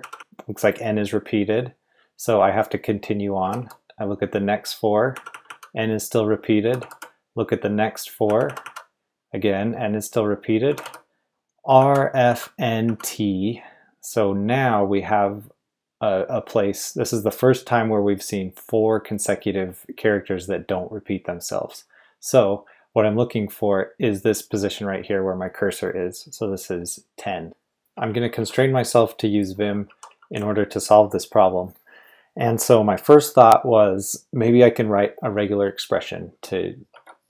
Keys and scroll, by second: 0.0 typing, 3.4 typing, 5.1-5.4 typing, 6.6 typing, 8.2-8.6 typing, 10.6-12.8 typing, 27.2-30.8 typing, 36.9 typing.